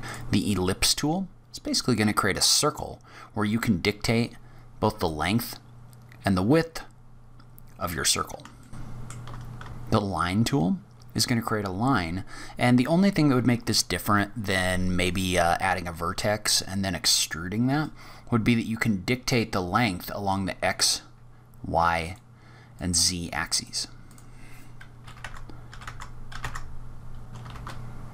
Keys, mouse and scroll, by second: 0.4-0.8 scroll down 3, 0.8-1.3 scroll up 3, 1.7-2.0 scroll down 1, 2.0-3.4 scroll up 1, 3.4 click, 5.4 click, 8.5 shift+middle click, 8.7 shift+scroll up 1, 8.9 shift+right click, 8.9 click, 8.9 shift+a, 9.0 Tab, 9.6-10.2 scroll down 5, 10.1-12.7 scroll up 3, 17.7 click, 22.6 click, 24.0 click, 27.3 click, 27.3 shift+right click, 27.3 scroll up 4, 27.3 shift+a.